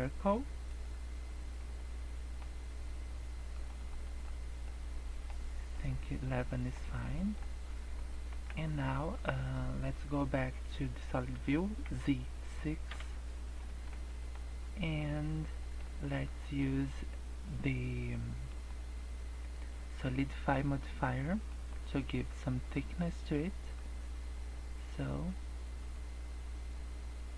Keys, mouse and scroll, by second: 1.5 scroll up 1, 1.7 middle click, 3.5 click, 3.8 click, 4.1 click, 4.5 scroll down 3, 4.6 middle click, 5.3-5.6 scroll up 3, 5.6 middle click, 6.4-6.7 scroll down 2, 6.5 middle click, 6.7 scroll up 1, 7.2 middle click, 7.5 scroll down 1, 7.9 scroll up 1, 8.4 Tab, 8.7 middle click, 9.0 scroll up 1, 11.9 z, 13.7 shift+middle click, 14.1 middle click, 15.5 middle click, 18.5 click, 23.7 click.